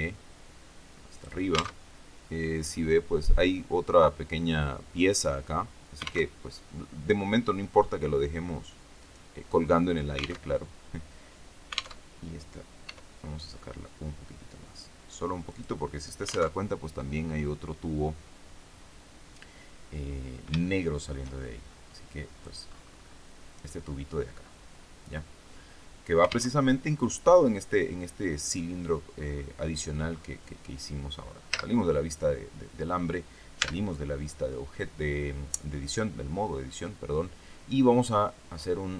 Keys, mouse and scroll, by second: 1.0 click, 1.6 alt+Tab, 6.2 alt+Tab, 7.7-8.2 scroll up 2, 8.9 right click, 9.4-9.8 scroll down 2, 10.3 alt+Tab, 11.9 alt+Tab, 12.8 e, 15.4 click, 16.4 alt+Tab, 19.8-20.2 scroll down 4, 20.6 shift+middle click, 21.8 scroll up 2, 22.0 click, 22.6-23.2 scroll up 2, 26.4 alt+Tab, 29.1-29.4 scroll up 2, 30.0-31.4 scroll down 2, 31.4 z, 33.5 Tab.